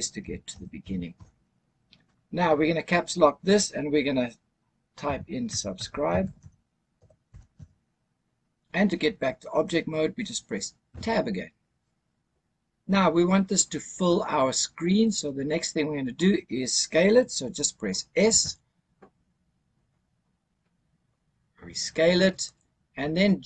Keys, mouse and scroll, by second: 0.1 BackSpace, 0.4 BackSpace, 0.7 BackSpace, 1.0 BackSpace, 4.9-7.4 typing, 10.8 Tab, 18.2 s, 22.3 click.